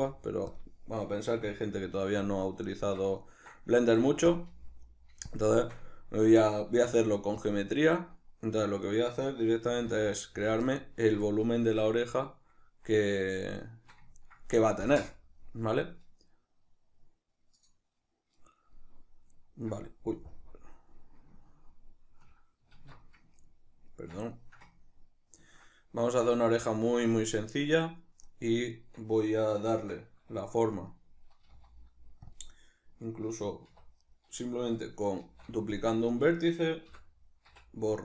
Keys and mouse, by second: 0.0 ., 1.3 s, 2.3 click, 2.6-4.4 shift+middle drag, 3.9 s, 4.4 click, 4.5 g, 5.4 click, 5.6-7.5 shift+middle drag, 6.9 s, 7.5 click, 7.7-8.7 shift+middle drag, 8.7 right click, 9.7 g, 10.5 click, 10.7-14.1 ctrl+middle drag, 18.4 middle click, 19.1 middle click, 20.0 middle click, 20.0 KP_Decimal, 21.2-28.5 ctrl+middle drag, 22.5 alt+q, 28.5 right click, 28.6-30.5 middle drag, 30.5 right click, 31.2 g, 32.1 click, 33.5 1, 33.7 right click, 34.9 shift+d, 35.5 click, 35.9 right click, 36.6 l.